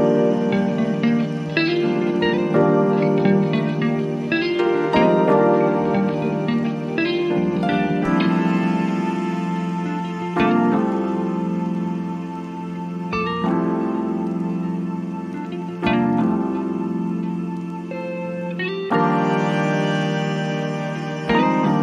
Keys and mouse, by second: 0.7-17.2 drag, 18.1 click, 20.3 click.